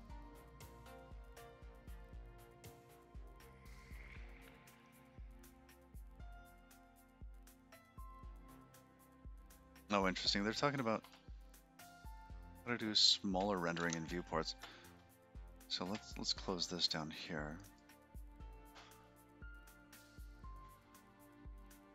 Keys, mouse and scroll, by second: 18.6 click, 20.0 middle click, 20.8 shift+middle click.